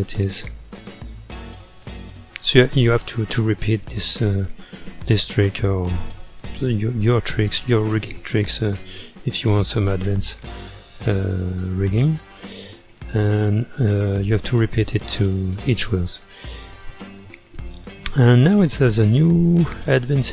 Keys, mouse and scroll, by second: 2.7 space, 4.7 scroll down 2, 5.3-6.1 middle drag, 6.1-7.0 scroll up 6, 7.0-8.1 middle drag, 8.1-8.5 scroll up 2, 8.5-11.5 middle drag, 13.3-14.3 scroll down 4, 14.3-17.2 middle drag, 17.2 space, 18.8 space.